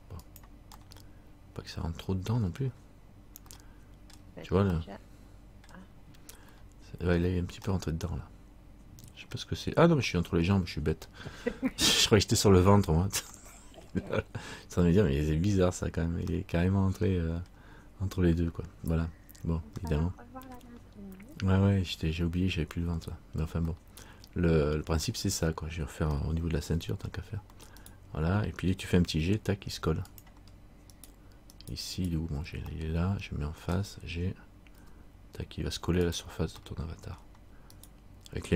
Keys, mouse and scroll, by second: 1.0 middle click, 2.8-3.6 scroll down 1, 3.7 middle click, 4.9 middle click, 6.7 middle click, 7.9 middle click, 16.4 middle click, 16.5 middle click, 20.0 middle click, 23.9 middle click, 26.3 shift+middle click, 27.1-28.0 scroll up 2, 28.0 right click, 28.0-29.2 scroll up 1, 29.2 g, 31.1 right click, 32.7 right click, 32.9 middle click, 34.9 g, 36.8 middle click, 37.9 right click.